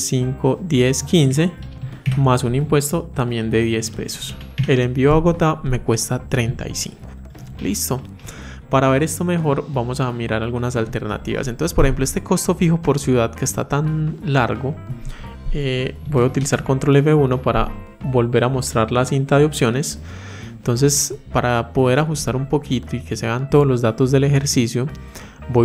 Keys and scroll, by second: 16.1 ctrl+F1.